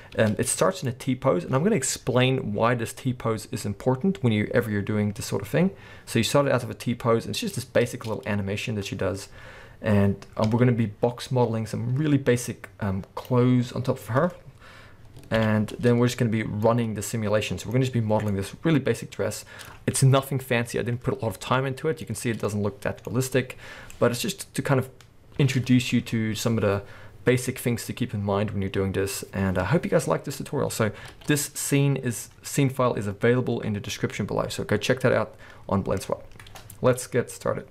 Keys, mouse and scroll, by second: 0.2 space, 0.9-8.2 drag, 7.9 space, 8.2-12.5 middle drag, 10.5 space, 12.5-16.6 drag, 15.4 alt+h, 16.3-16.6 scroll up 2, 16.6-37.7 middle drag, 17.8-18.3 scroll up 2, 22.5-23.1 scroll up 1, 24.0-25.2 scroll down 1, 25.4 space.